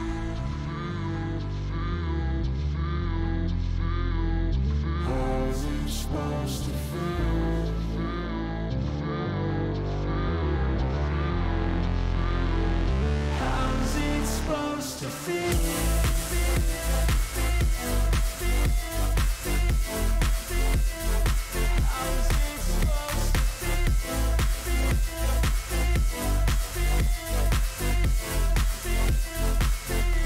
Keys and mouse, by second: 1.4-2.6 drag, 5.2 click, 6.7 click, 9.5 click, 10.2 click, 12.2-13.4 drag, 14.9 click, 17.1-18.5 drag, 20.5 alt+click, 21.9 alt+shift+click, 22.3 alt+shift+click, 23.5 alt+shift+click, 27.1-28.6 drag.